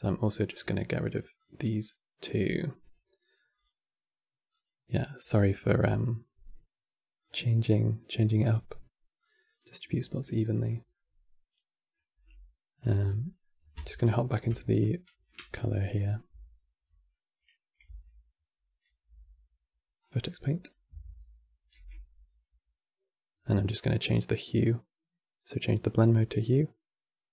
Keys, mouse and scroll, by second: 0.2-7.2 drag, 8.1-9.3 drag, 9.8-10.1 scroll down 5, 10.1-12.7 middle drag, 12.7 scroll down 6, 12.9 middle click, 13.8 ctrl+shift+click, 15.1 q, 16.0 Tab, 17.6 Tab, 18.9 Tab, 21.4 n, 23.4-26.4 drag.